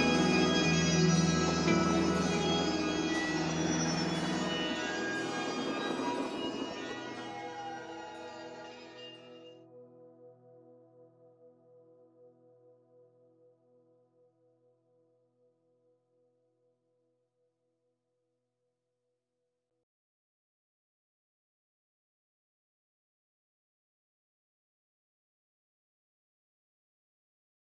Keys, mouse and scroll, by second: 12.0 click, 13.2 g, 22.1 click, 23.0 scroll up 1, 26.7 g.